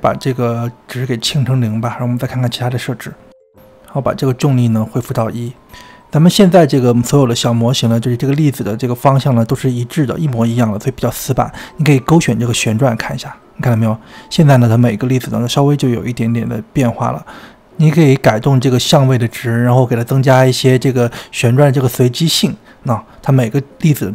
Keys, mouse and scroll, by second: 0.6-1.0 drag, 1.2-3.0 drag, 4.1-5.4 drag, 5.5 click, 6.2-8.8 scroll up 5, 11.8 click, 17.5-23.3 drag.